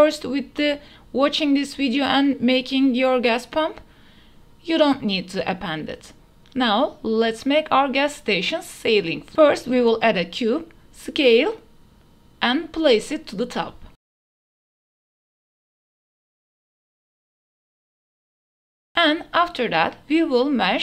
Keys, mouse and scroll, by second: 0.2 middle click, 2.5 shift+middle drag, 3.9-5.8 drag, 6.4 shift+a, 8.6 middle click, 9.0 s, 10.0 s, 10.2 z, 12.2 g, 12.6 z, 14.0 shift+drag, 14.1 click, 14.2 s, 14.5 shift+z, 15.8 middle click, 15.8 Tab, 16.0 3, 16.2 g, 16.3 z, 16.5 Tab, 16.5 middle click, 16.8 click, 17.0 Tab, 17.2 click, 17.6 KP_7, 17.8 g, 17.9 x, 18.3 click, 18.4 Tab, 19.4 shift+a.